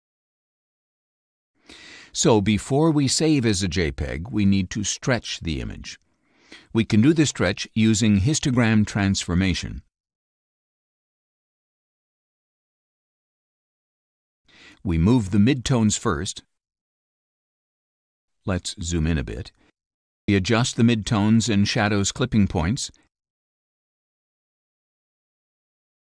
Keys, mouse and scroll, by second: 1.0 click, 3.2 click, 6.3 click, 8.8 click, 10.5 click, 13.1 click, 15.3-17.5 drag, 18.7 click, 19.8 3, 20.2 0, 22.6-24.0 drag, 24.9-26.1 drag.